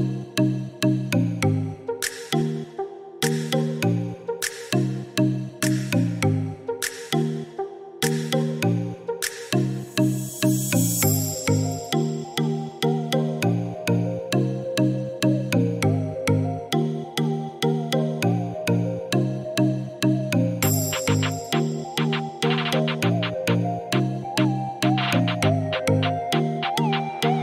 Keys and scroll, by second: 2.7-3.5 typing, 10.6 1, 10.9 4, 11.2 Return, 17.3-18.1 typing.